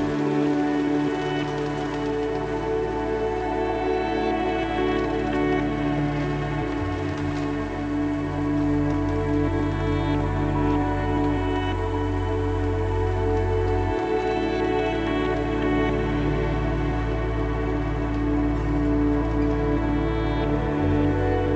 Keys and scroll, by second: 3.5 1, 9.7 1, 10.5 1, 12.3 1.